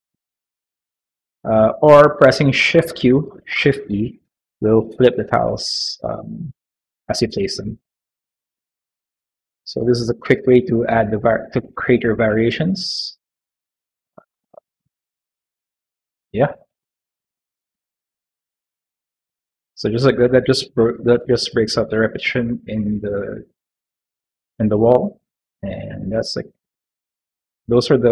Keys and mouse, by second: 0.1 click, 2.6 shift+q, 3.4 shift+e, 6.0 click, 7.1 shift+q, 7.5 click, 8.3 shift+e, 8.7 q, 9.2 click, 11.5 click, 14.1 q, 15.2 click, 16.2 click, 16.9 e, 17.2 click, 17.8 click, 18.2 click, 20.1 Tab, 20.4 click, 21.1 shift+middle click, 23.2-25.3 middle drag, 25.6 shift+middle click, 26.2 middle click, 26.8 middle click, 27.7 middle click.